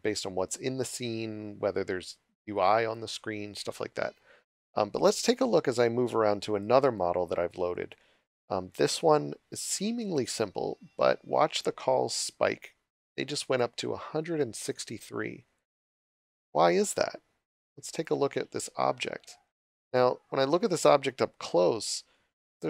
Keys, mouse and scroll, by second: 15.7 w, 16.1 a, 18.0 d, 19.5 s, 19.9 d, 21.8-22.6 typing.